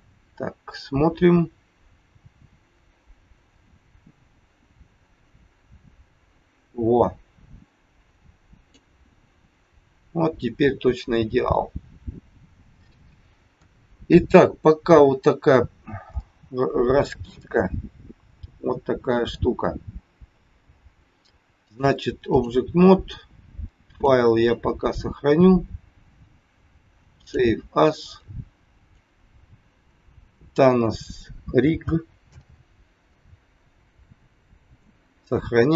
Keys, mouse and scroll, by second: 3.5 click, 9.4-10.1 scroll down 5, 12.0-12.8 scroll up 2, 13.5 KP_1, 14.5-14.9 scroll down 3, 16.1 shift+middle click, 17.3 middle click, 19.7-20.1 scroll up 2, 20.3 scroll down 2, 21.6 click, 23.9 click.